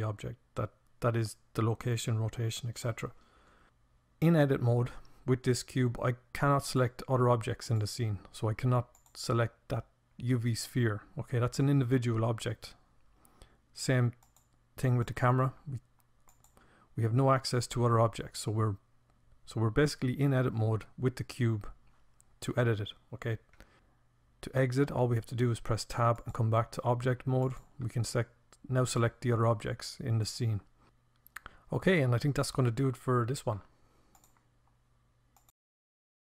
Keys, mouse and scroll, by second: 5.5-9.8 drag, 13.1-18.2 drag, 23.9 Tab, 26.2-28.9 right drag, 28.9 click, 29.4-31.0 right drag.